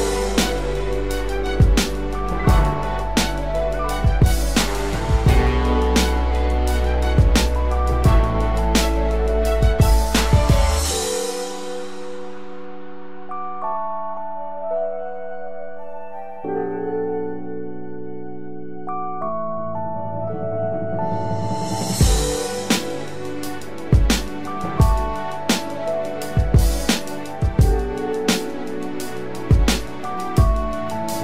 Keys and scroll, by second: 4.9 ctrl+0, 5.5 ctrl+0, 12.6 ctrl+-, 13.1 ctrl+=, 22.9 ctrl+=.